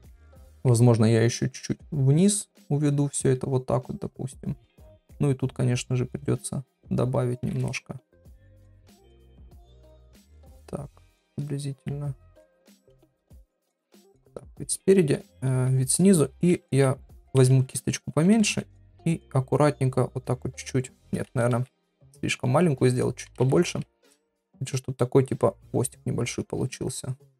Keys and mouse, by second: 0.3 middle click, 2.1-3.4 drag, 4.3-5.6 drag, 6.4-8.1 drag, 7.9 shift+middle click, 9.2-10.6 drag, 11.2 click, 12.4 middle click, 14.2 KP_1, 15.1 ctrl+KP_7, 16.5 [, 16.7-17.9 [, 18.3 ], 18.5 ], 19.8-20.9 drag, 22.4 ctrl+z, 23.2 ], 23.4 ], 24.9 click, 26.7-27.3 drag.